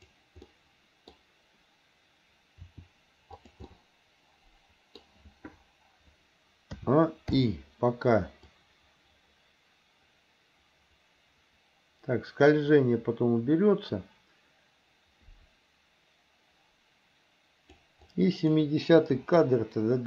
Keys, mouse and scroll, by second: 0.5-1.2 middle drag, 2.6 r, 3.7-5.0 middle drag, 6.8 a, 7.5 i, 8.6-17.9 drag, 18.2 click, 19.2 Delete.